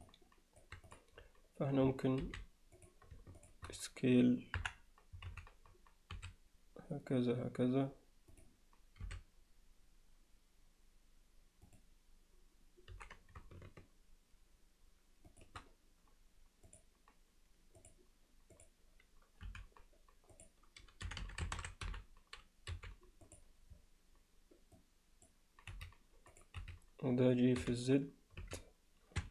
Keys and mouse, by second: 0.1-0.6 alt+middle drag, 2.2 alt+h, 3.5 shift+drag, 4.6 KP_1, 5.3 z, 6.1 s, 9.0 r, 12.9 g, 16.7 click, 19.5 m, 24.8 click, 25.7 z, 26.3 click, 26.6 z, 27.6 g.